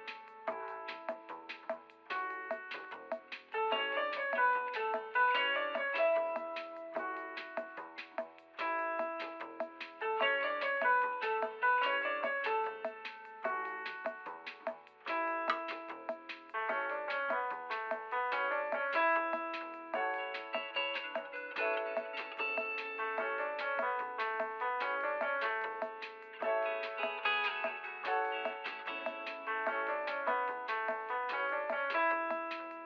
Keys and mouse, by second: 6.1 f, 7.8 f, 10.2 f, 11.2-13.1 middle drag, 14.5 middle click, 15.0 f, 15.2 f, 16.9 click, 17.4 click, 17.9 f, 18.5 f, 18.9 f, 22.4 f, 23.2 f, 23.9 middle click, 28.4 middle click, 29.2 click, 30.1 middle click, 30.6 drag, 30.7 a, 30.9 middle click, 31.6 f.